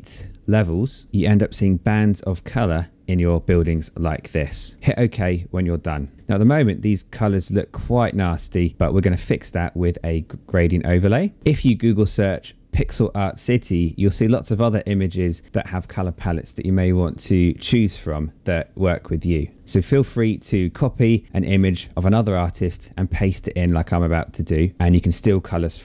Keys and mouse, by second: 5.0 click.